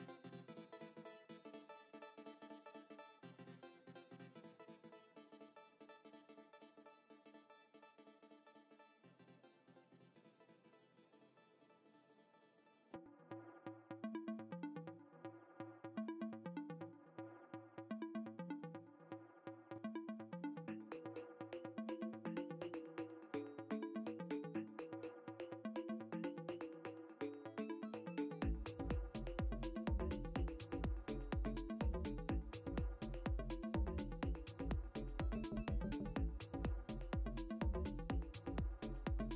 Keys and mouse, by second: 9.1 space, 10.2 ctrl+space, 11.6 g, 12.7 alt+click, 14.5 ctrl+click, 16.0 click, 17.6 b, 20.4 click, 26.1 ctrl+z, 30.2 ctrl+click, 31.7 click, 33.4 click, 34.2 alt+s, 34.6 alt+m, 35.0 alt+c, 36.4 KP_2, 37.0 Return.